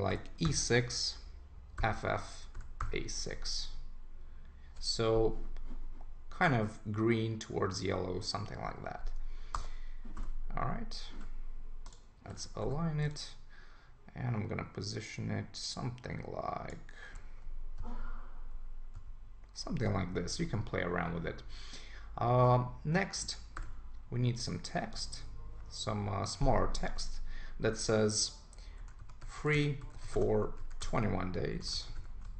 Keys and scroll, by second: 9.6 Return, 11.1 super+a, 12.4 super+d, 17.8 Down, 20.4 super+s, 28.8 shift+f, 31.5 shift+d.